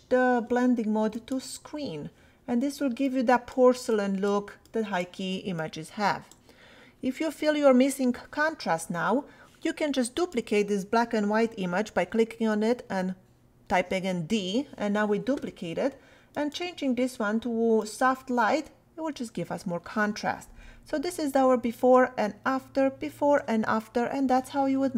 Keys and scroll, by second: 12.5 d, 21.0 \, 22.9 \.